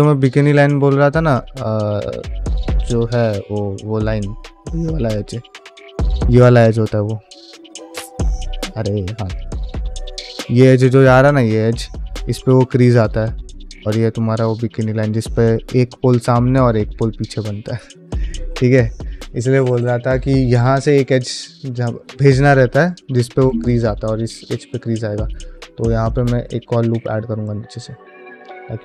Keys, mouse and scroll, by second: 0.1 click, 0.2 g, 1.2 click, 1.5 g, 2.2 middle click, 2.4 3, 2.9 alt+click, 3.4 middle click, 4.5 2, 4.9 alt+click, 5.4 1, 6.1 2, 6.6 alt+click, 8.3 alt+click, 9.2 alt+shift+click, 9.7 ctrl+middle click, 9.9 middle click, 11.1-13.8 middle drag, 15.9 middle click, 16.5 middle click, 18.3-19.6 middle drag, 19.8 middle click, 20.3 middle click, 24.5 middle click, 25.5 ctrl+e, 26.2 ctrl+r, 27.9 middle click, 28.5-28.8 middle drag.